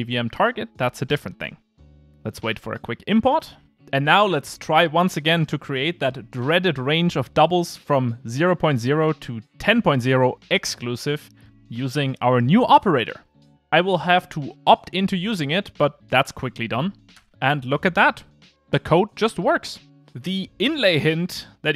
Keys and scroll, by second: 2.1 shift+super+i, 9.0 alt+shift+Left, 18.4 alt+Return.